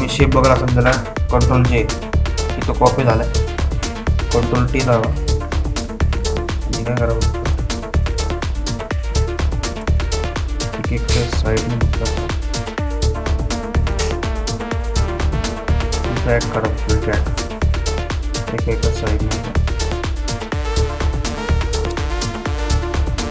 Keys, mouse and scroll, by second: 2.9 ctrl+j, 5.5 ctrl+t, 7.0 scroll up 2, 8.3 space, 8.5 click, 8.8 space, 9.9 click, 10.3 space, 10.8 click, 11.0 space, 12.2-23.3 ctrl+drag.